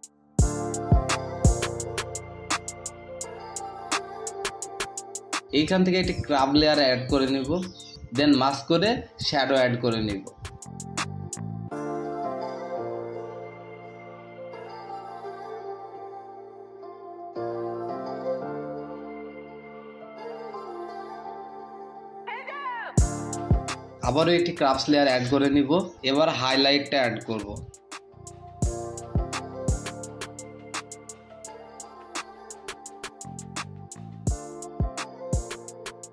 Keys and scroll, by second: 5.0 Return, 12.0 space, 12.3 space, 12.5 space, 15.7 typing, 18.0-20.6 typing, 31.5-33.7 typing.